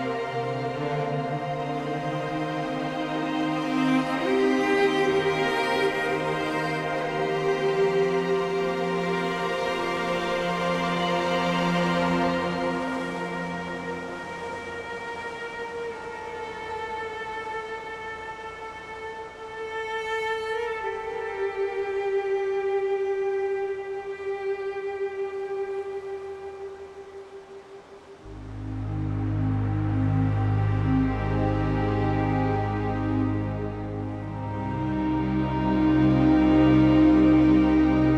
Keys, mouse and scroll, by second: 1.2 z, 3.7 scroll down 9, 4.2-8.8 middle drag, 8.8 z, 15.7-38.1 drag.